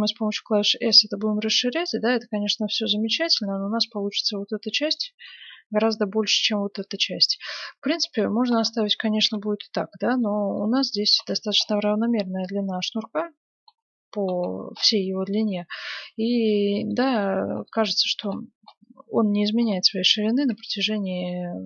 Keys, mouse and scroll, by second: 4.4-6.7 middle drag, 6.8-11.6 middle drag, 9.2 KP_1, 12.4 middle click, 13.9-14.4 scroll down 1, 16.6-21.6 middle drag.